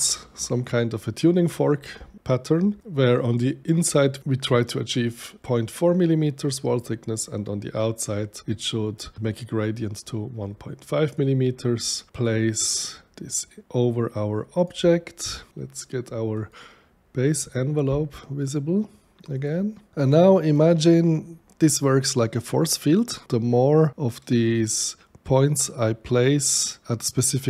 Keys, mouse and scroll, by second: 10.4 click, 12.1-14.6 drag, 16.3 click, 19.3 click, 19.9 right click, 21.0-24.7 middle drag, 24.7-27.4 right drag.